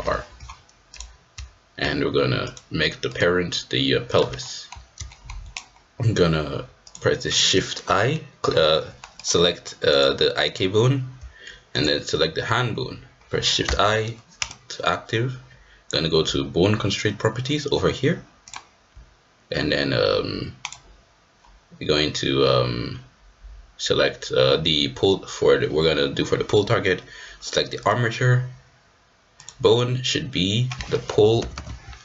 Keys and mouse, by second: 3.0-4.2 drag, 4.4 shift+middle click, 5.1 shift+middle click, 5.5-6.5 drag, 6.8 shift+click, 9.9-12.7 drag, 13.7 shift+i, 29.5-32.0 drag.